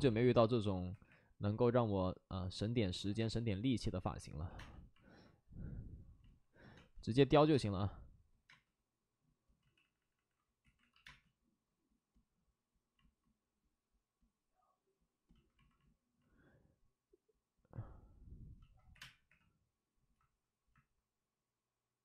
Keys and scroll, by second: 0.0-1.3 typing, 2.9 alt+s, 3.1 space, 4.4 2, 4.5 space, 6.7 space, 9.5 ctrl+z, 9.5 space, 10.9 ctrl+z, 10.9 x, 11.0 space, 18.9 3, 18.9 space, 19.2 3.